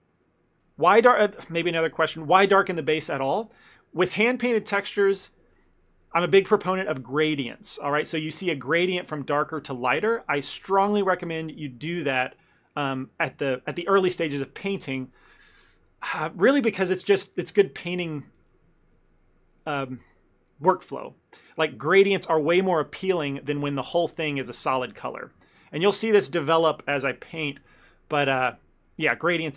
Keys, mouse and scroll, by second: 0.3 click, 0.8 click, 24.1 ctrl+z, 24.5 ctrl+z, 24.6 ctrl+z, 25.0 ctrl+z, 26.2 ctrl+shift+z, 28.0 ctrl+middle click, 28.5 shift+middle click.